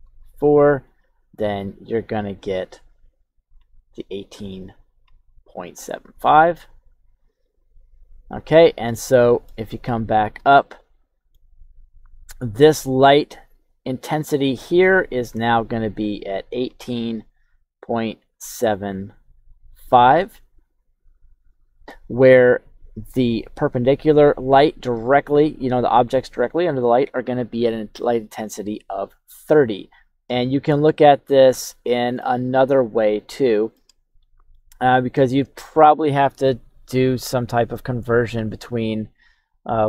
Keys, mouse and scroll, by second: 0.2 click, 4.8 click, 5.2 click, 6.1 click, 6.6 click, 7.2 click, 7.7 click, 8.5-8.8 scroll down 1, 8.8 shift+middle click, 9.7-10.5 scroll up 5, 10.5 shift+middle click, 15.0 click, 15.6-16.6 drag, 16.8 click, 17.6 click, 18.4 click, 19.1 click, 29.8-30.3 scroll down 1, 30.3-32.1 shift+middle drag, 32.4-32.8 scroll down 2, 32.9 middle click, 34.1 shift+middle click, 34.9-35.5 scroll up 3, 35.5 shift+scroll down 1, 35.6 shift+middle click, 35.9 scroll up 1, 36.9-38.6 scroll down 2.